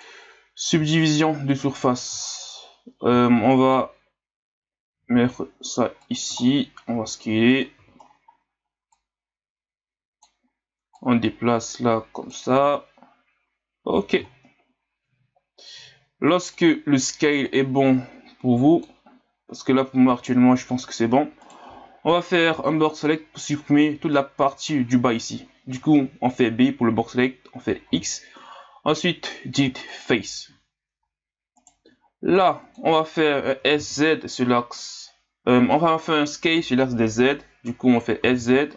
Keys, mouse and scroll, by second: 0.5 scroll up 1, 0.7 Tab, 1.5 click, 2.2 scroll down 6, 3.2 scroll down 1, 4.9 g, 6.4 scroll down 5, 6.9 s, 7.8 z, 8.0 scroll up 4, 8.9-12.7 drag, 12.7 scroll up 1, 13.8-14.3 scroll up 1, 14.3-15.8 scroll down 1, 15.8 s, 17.4-20.5 drag, 21.4 right click, 21.6 b, 27.9 x, 31.6 right click, 31.8 b, 33.6 s.